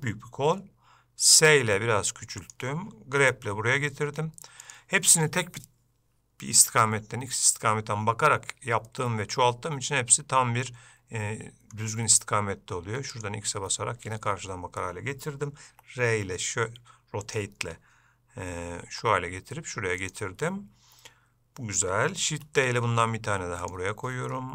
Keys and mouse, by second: 9.0-11.9 middle drag, 22.6 shift+d.